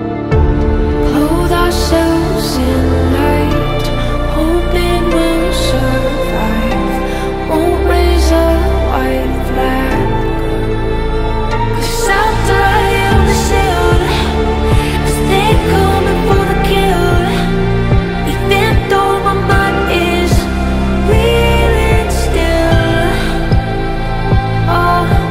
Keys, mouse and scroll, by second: 3.5-7.7 typing, 4.1 Down, 4.2 Right, 21.8 ctrl+t, 25.1 ctrl+z.